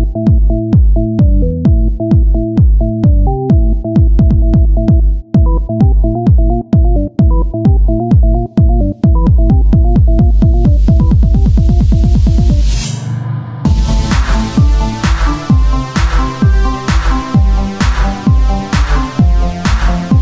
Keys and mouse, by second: 0.3 z, 1.2 c, 1.6 z, 2.8-5.0 drag, 6.2-8.3 drag, 8.3 z, 8.6 c, 9.0 z, 9.3-11.0 drag, 11.4 z, 11.6 c, 12.1 z, 13.3-15.0 drag, 15.0 z, 15.3 c, 15.5 click, 15.6 z, 16.0-17.6 drag, 16.8 Tab, 18.8-20.2 drag.